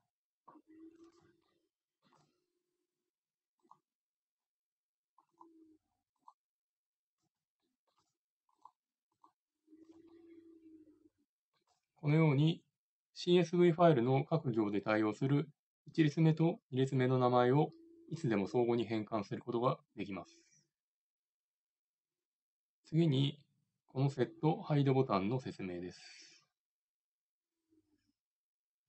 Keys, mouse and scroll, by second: 3.6-28.8 drag, 8.6-28.8 middle drag.